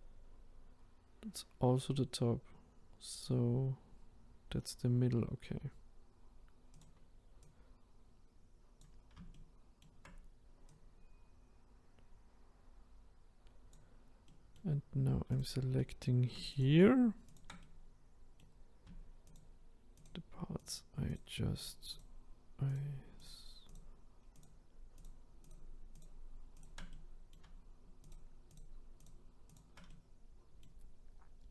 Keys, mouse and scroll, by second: 7.5 click, 14.3-15.4 middle drag, 15.4 click, 15.8 middle click, 16.6 shift+click, 17.4 shift+click, 17.6-19.4 middle drag, 19.4 shift+click, 20.0 shift+click, 21.7 shift+click, 22.7 shift+click, 23.2 shift+click, 24.4 shift+click, 25.0 shift+click, 26.9-28.1 middle drag, 28.1 shift+click, 28.5 shift+click, 29.9-31.1 middle drag, 31.1-31.5 scroll down 2.